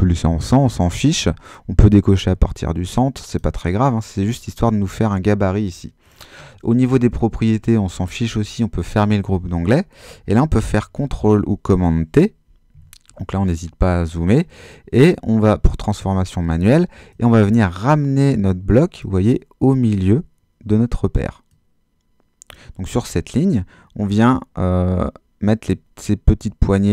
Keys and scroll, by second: 10.8 super+t, 12.7 super++.